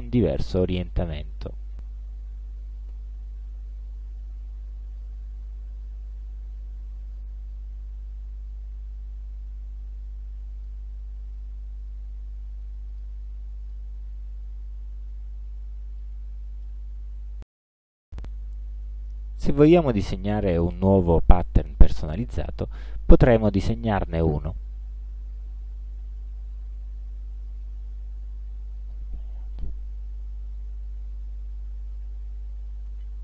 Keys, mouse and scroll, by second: 5.6-6.2 ctrl+scroll up 2, 7.2-10.9 drag, 11.4 ctrl+scroll down 2, 13.0 click, 13.7 click, 14.1-14.4 scroll down 2, 14.7 ctrl+scroll down 2, 15.2 ctrl+scroll up 2, 16.1 ctrl+middle click, 19.4 click, 23.0-24.5 drag, 25.4-26.8 drag, 27.6-29.2 drag, 30.1 ctrl+z.